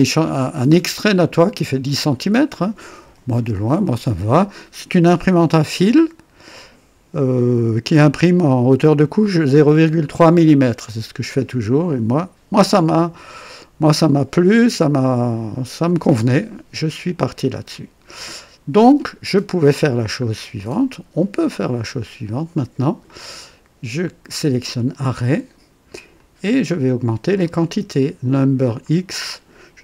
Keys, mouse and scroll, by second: 17.5 click, 19.4 scroll up 1, 19.9 scroll down 1, 20.5-21.5 drag, 21.6-22.4 right drag, 22.5 click, 24.2 click, 26.1-27.6 drag, 28.5 click.